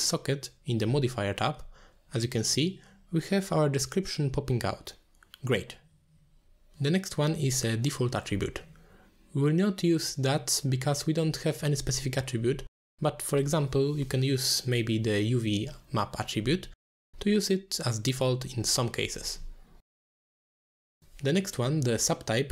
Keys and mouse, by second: 21.9-22.5 drag.